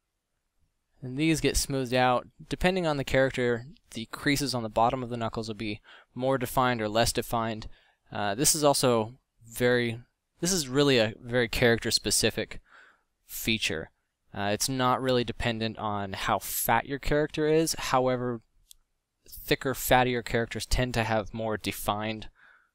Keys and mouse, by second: 1.2 middle drag, 9.2 f, 13.0 f, 14.8 f, 15.7 f.